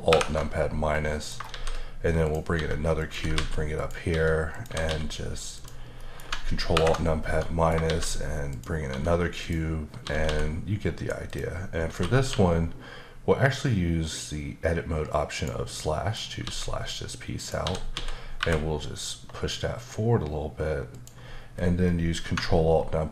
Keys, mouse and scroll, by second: 0.1 ctrl+alt+KP_Subtract, 0.8 scroll up 1, 0.9 middle click, 1.5 shift+a, 2.2 click, 2.5-4.9 typing, 3.0 click, 3.8 click, 4.5 click, 5.5 click, 6.0 middle click, 6.7 ctrl+alt+KP_Subtract, 7.4 middle click, 7.8 shift+a, 8.5 click, 8.9 s, 9.4 click, 10.0 typing, 11.3 click, 12.3 q, 15.1 click, 15.8 middle click, 16.4 s, 17.4 click, 17.6-18.4 typing, 20.9 click.